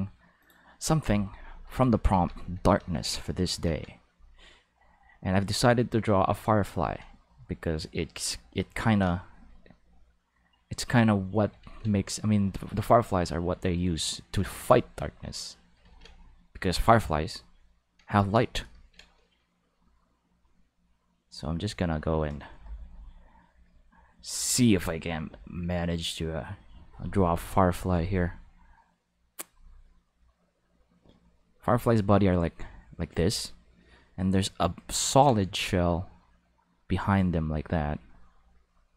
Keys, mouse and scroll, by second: 0.4 click, 2.1 Tab, 2.8 x, 3.0 click, 4.0 click, 5.2-6.4 drag, 6.8 ctrl+z, 7.2-8.6 drag, 8.8 ctrl+z, 9.2-10.6 drag, 11.7 ctrl+z, 12.3 click, 14.5 ctrl+z, 14.9 click, 16.0-17.3 drag, 20.2 click, 21.6 click, 24.4 click, 26.0 click, 30.3-32.0 drag, 34.1 click, 35.0 ctrl+z, 35.6 click, 37.0 click, 38.1 click.